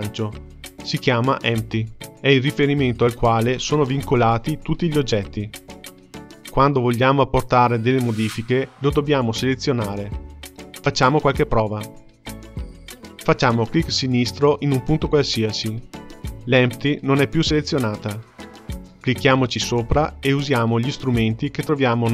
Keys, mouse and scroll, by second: 11.5-13.8 scroll up 4, 13.8 click, 20.3 click.